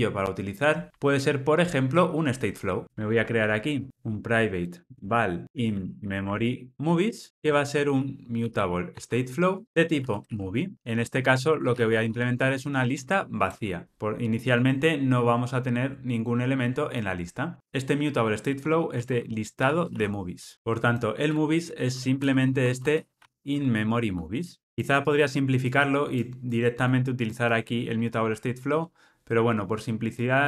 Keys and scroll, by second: 4.6 Return, 10.7 Return, 24.4 Return.